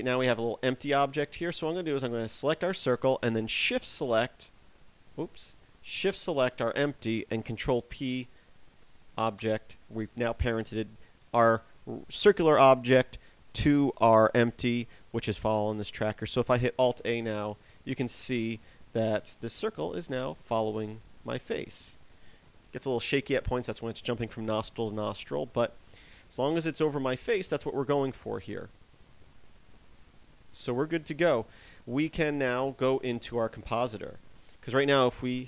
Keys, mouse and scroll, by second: 0.4 right click, 0.8 right click, 2.6 right click, 4.8 shift+right click, 5.8 right click, 6.6 shift+right click, 8.2 ctrl+p, 17.4 alt+a, 34.8 Escape.